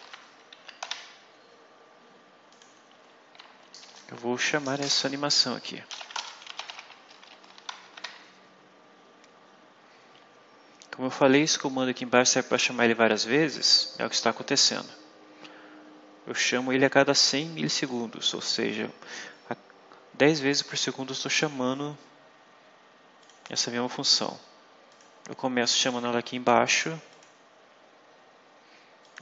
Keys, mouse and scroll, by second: 0.0-0.7 typing, 0.5 End, 2.4 click, 3.7 Return, 5.4-7.9 typing, 17.1 click, 23.1 click, 24.8 click, 25.6 click, 26.4 click, 27.0 click, 28.9 click.